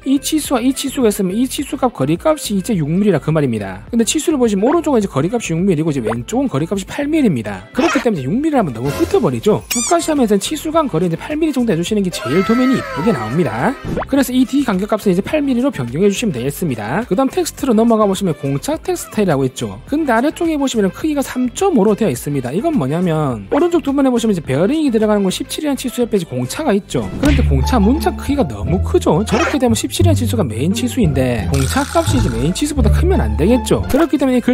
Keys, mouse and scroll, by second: 15.5 click, 17.7 click.